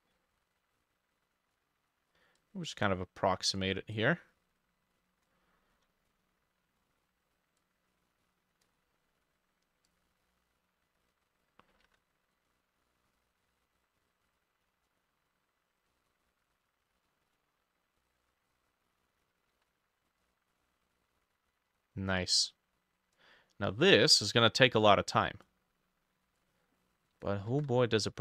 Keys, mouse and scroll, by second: 11.9 ctrl+d, 19.6 ctrl+d, 27.6 ctrl+d.